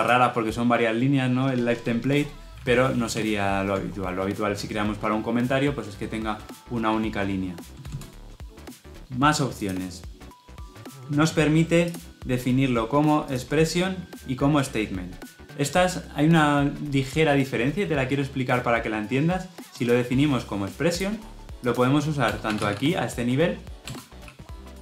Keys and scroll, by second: 2.4 ctrl+z, 2.9 ctrl+z, 23.8 Return.